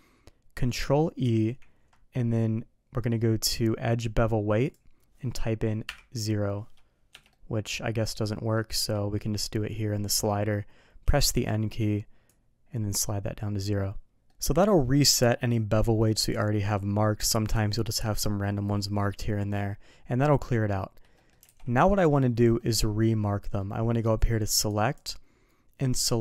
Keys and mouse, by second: 1.2 ctrl+e, 7.3-8.5 middle drag, 8.8 n, 8.8 n, 11.0 n, 11.3 n, 12.3 click, 14.3 middle click, 21.1 middle click, 21.5 alt+a, 21.8 middle drag, 22.6 middle drag, 23.4 middle click, 24.7-26.2 drag.